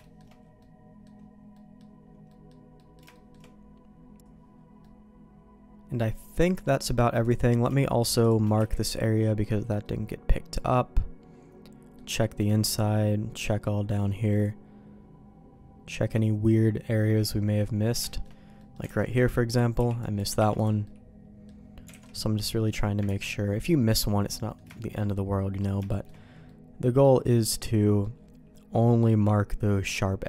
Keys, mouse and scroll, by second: 0.0 shift+middle click, 0.5 middle click, 1.5 middle click, 2.2 middle click, 2.7 middle click, 3.1 shift+middle click, 4.8-6.6 middle drag, 6.8 middle click, 7.2 click, 8.2 shift+click, 8.5 q, 9.8-11.9 middle drag, 12.1 shift+middle click, 12.6-17.8 middle drag, 18.0 shift+middle click, 18.5 middle click, 19.3 alt+a, 19.7 b, 20.3 o, 20.8 middle click, 21.9 alt+a, 22.0 middle click, 23.0 ctrl+s, 23.2-24.5 middle drag, 24.7 shift+middle click, 25.1 middle click, 25.8 shift+middle click, 26.4 middle click, 27.6 middle click, 28.7-30.2 middle drag.